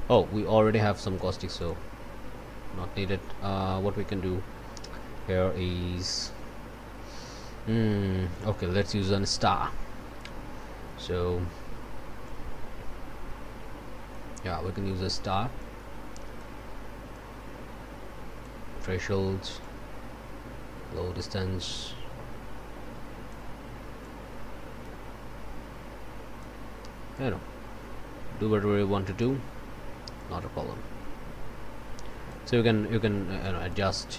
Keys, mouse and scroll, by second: 1.6 click, 8.7 click, 12.2-14.3 drag, 15.6-16.6 drag, 17.1-18.6 drag, 19.6-23.5 drag, 24.0-26.6 drag, 27.1-29.4 drag, 30.1-32.5 drag, 33.4 click.